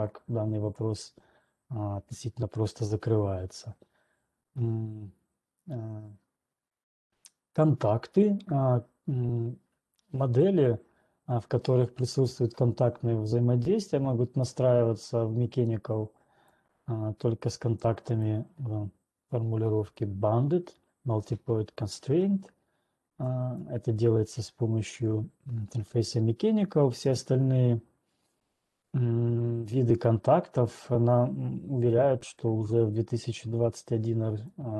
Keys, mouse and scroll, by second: 0.8 click, 16.8 click, 18.3 click, 23.8 click.